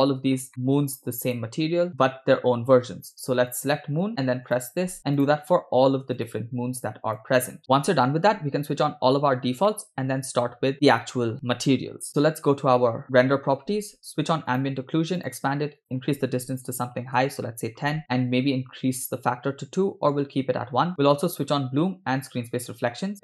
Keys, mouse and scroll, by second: 0.1 middle click, 0.5 shift+middle click, 1.3 click, 1.9-3.8 drag, 4.6 click, 5.3 click, 6.2-7.3 drag, 9.7-10.5 shift+middle drag, 13.1 click, 14.6 click, 15.2 click, 15.9-17.3 drag, 20.9 click, 22.3 click.